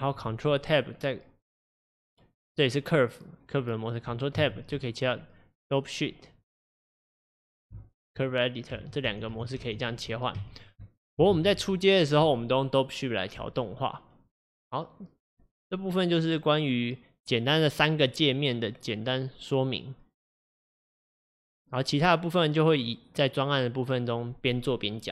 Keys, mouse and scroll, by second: 7.1-25.1 drag.